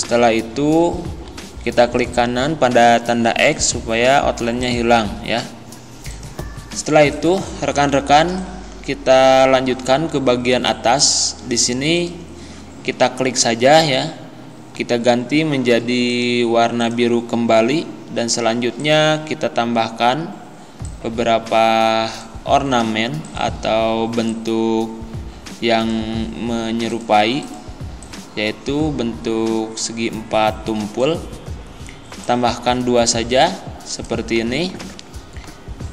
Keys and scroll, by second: 0.0 Right, 8.1 z.